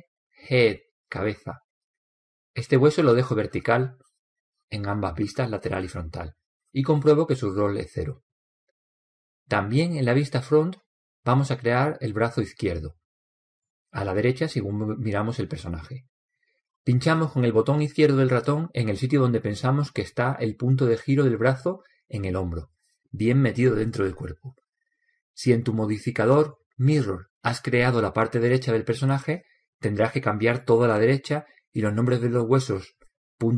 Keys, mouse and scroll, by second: 2.9 click, 14.0-15.9 middle drag, 15.7 KP_1, 16.6-18.4 middle drag, 23.3 click.